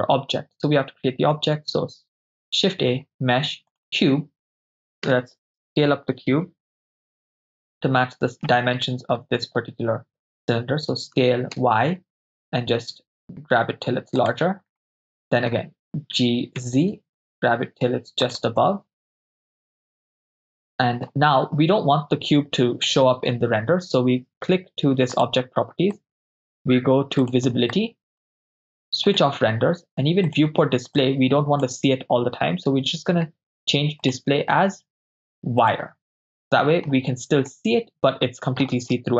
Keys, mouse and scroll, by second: 1.6 shift+a, 5.0 KP_0, 6.4 KP_7, 7.8-8.5 ctrl+middle drag, 11.2 s, 11.6 y, 14.3-14.9 ctrl+drag, 14.9-15.5 middle drag, 16.2 g, 16.7 z, 18.3 ctrl+click, 18.7-21.1 middle drag, 25.2 click, 26.0 click, 27.3 click, 27.7 click, 29.1 click, 30.3 drag, 31.0 click, 34.1-35.8 drag, 36.4-36.9 middle drag, 37.6-38.6 middle drag.